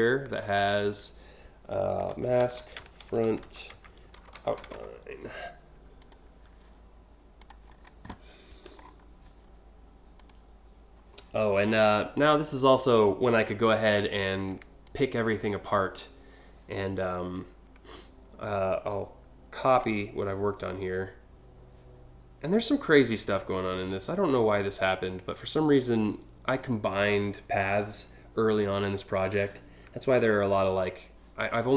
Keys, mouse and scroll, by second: 0.0 click, 0.1 click, 1.5-4.9 typing, 5.6 click, 7.0 click, 8.4 scroll down 1, 9.8 click, 14.5 ctrl+click, 19.2 ctrl+c.